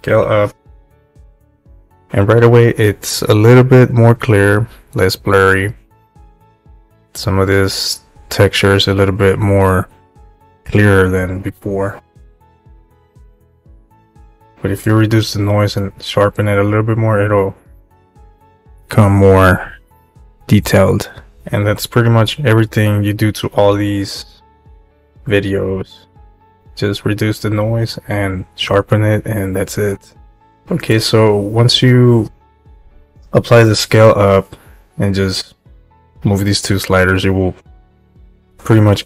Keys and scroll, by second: 0.0-0.6 typing.